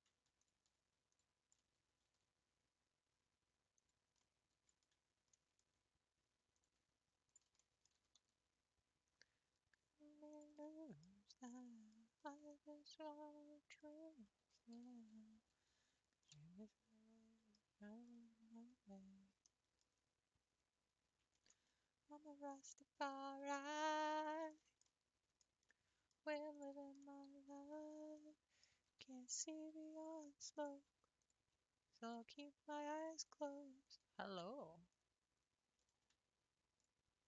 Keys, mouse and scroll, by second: 0.4 alt+click, 1.1 alt+click, 2.0 s, 4.3-5.9 middle drag, 5.9-6.5 scroll up 1, 6.5 click, 7.3 shift+click, 7.8 middle click, 8.1 g, 10.6 middle click, 11.1 scroll down 2, 11.5 middle click, 12.4-14.9 middle drag, 14.9 ctrl+s, 15.9 Tab, 16.3-20.7 middle drag, 20.7-21.3 scroll up 3, 21.3-24.0 shift+middle drag, 24.0 Tab, 24.4 scroll up 3, 24.6-26.5 shift+middle drag, 26.5 click, 27.2-28.9 middle drag, 28.9 g, 31.2 shift+click, 32.0 shift+click, 33.1 click, 33.9-34.4 scroll down 2, 34.4 r, 36.8 alt+click.